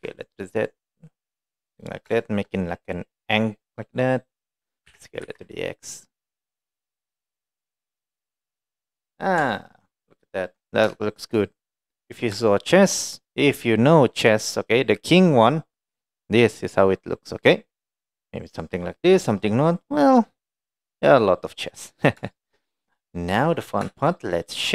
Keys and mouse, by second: 2.2 shift+middle click, 3.4 click, 4.9 s, 8.1 click, 8.5 middle click, 9.5 Tab, 9.7-10.5 middle drag, 11.1 shift+middle drag, 11.8-12.1 middle drag, 12.6 shift+middle drag, 13.3-14.6 middle drag, 15.5-15.9 middle drag, 17.0-17.6 middle drag, 19.9-20.2 middle drag, 20.9-21.3 middle drag, 21.7 middle drag, 22.4 shift+middle drag, 22.8-23.1 middle drag, 23.6 click.